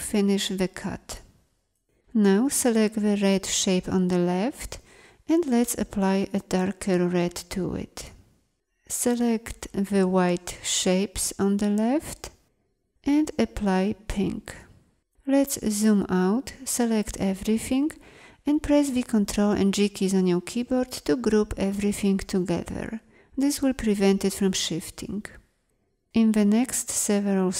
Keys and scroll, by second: 14.7 ctrl+0, 18.7 ctrl+g.